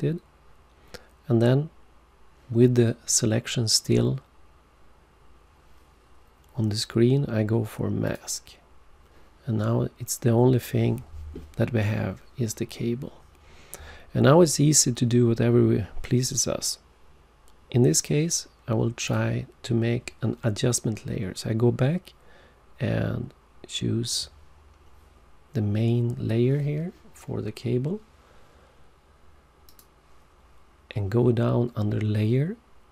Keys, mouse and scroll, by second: 8.0 click, 19.0 click, 29.7 click.